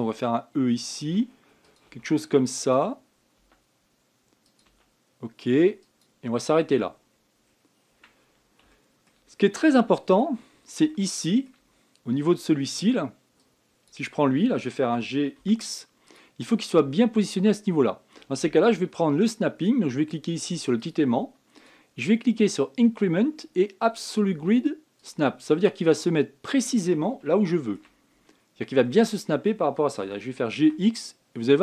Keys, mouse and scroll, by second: 0.7 e, 1.8 e, 2.6 e, 4.1 e, 5.4 e, 7.2-8.7 scroll down 18, 9.5 shift+middle click, 10.1-10.7 scroll up 7, 10.7 shift+middle click, 11.2-11.6 scroll up 7, 11.6 shift+middle click, 12.4 scroll up 2, 14.1 click, 15.7 g, 17.3 scroll up 5, 21.5 click, 22.3-25.5 drag, 26.7-27.0 scroll up 6, 27.5-28.0 scroll down 1, 28.0 shift+middle click, 28.8 scroll up 5, 29.6-30.8 shift+middle drag, 30.8 g.